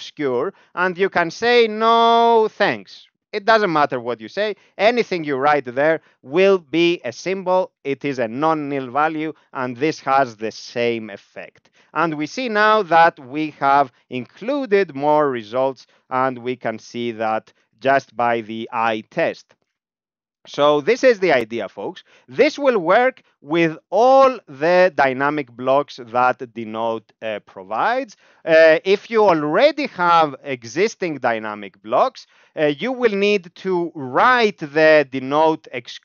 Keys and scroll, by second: 1.1 typing, 4.5 ., 4.9 ctrl+u, 12.8 Down, 13.0 Down, 13.3 Down, 13.5 Down, 13.6 Down, 13.8 Down, 13.9 Down, 14.1 Down, 14.4-15.7 Up, 15.8 Up, 16.0 Up, 16.2 Up, 16.6-17.9 Down, 18.8 Down, 19.6 Down, 32.3 Right, 35.5 ctrl+r.